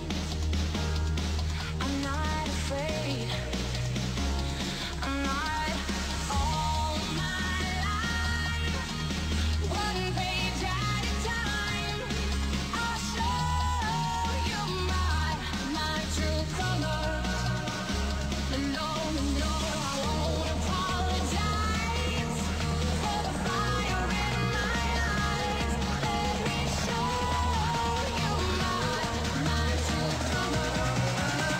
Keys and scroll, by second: 9.8 s, 20.3 ctrl+z, 26.0 w, 30.7 v.